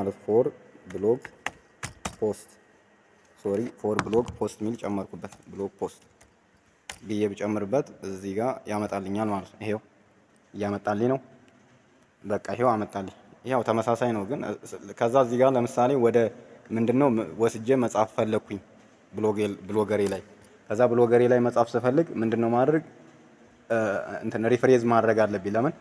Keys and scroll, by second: 19.9 ctrl+c.